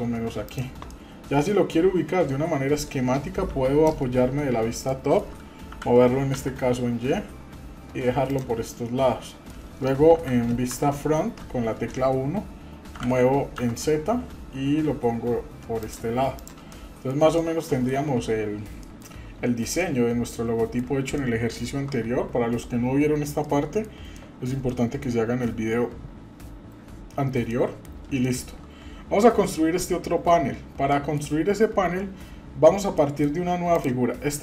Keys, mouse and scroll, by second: 0.9-2.8 middle drag, 3.4 KP_7, 4.2-4.6 scroll up 3, 4.9-5.3 shift+middle drag, 5.7 g, 8.6 middle click, 10.1 KP_3, 10.7 KP_1, 12.9 g, 16.3 click, 16.7-17.1 middle drag, 17.4-19.2 middle drag, 19.8-20.8 middle drag, 21.1-21.7 shift+middle drag, 21.7 shift+scroll down 1, 23.4-23.8 middle drag, 24.1 middle click, 24.7-25.0 middle drag, 25.3 scroll down 2, 27.5-27.9 middle drag, 28.2 shift+middle click, 30.9 middle click, 33.0 middle click, 33.7 click, 34.0-34.4 scroll up 2.